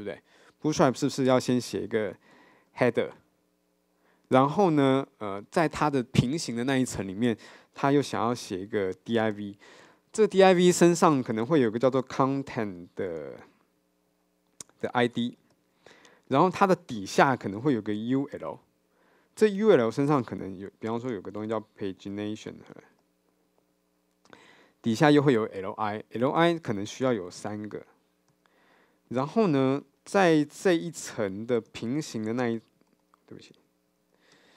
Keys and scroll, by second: 33.1 super+x, 33.5 super+z.